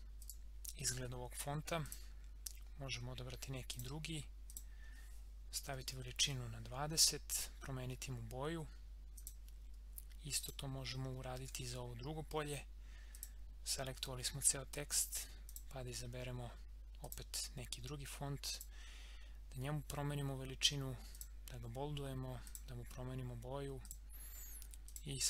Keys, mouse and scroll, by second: 7.3 click, 11.3 ctrl+a, 13.1 click, 15.5 click, 21.1 click.